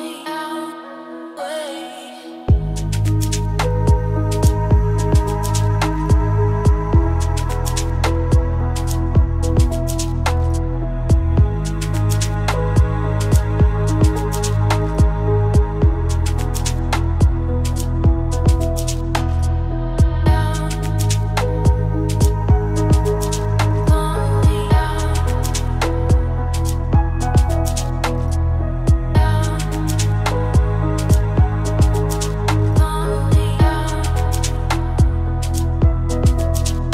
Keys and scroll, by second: 2.6 shift+a, 5.3 g, 7.4 s, 12.0 KP_0, 12.8 z, 24.1 z, 24.3 z.